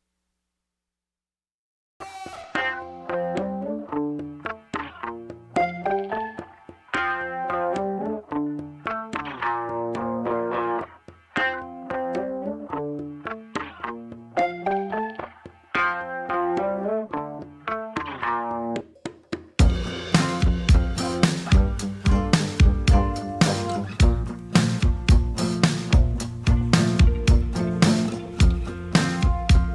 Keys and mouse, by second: 1.8 s, 2.3 ctrl+z, 3.3 1, 4.0 s, 5.7 click, 6.7 r, 7.6 g, 10.1 l, 10.8 click, 10.9 p, 12.2 Tab, 13.6 l, 14.3 click, 15.0 x, 16.0 Tab, 16.7 shift+h, 17.1 l, 17.4 Delete, 18.6 Tab, 19.9 e, 22.2 3, 23.0 l, 24.2 i, 26.2 g, 28.1 middle click, 28.6 Tab, 29.3 ctrl+1.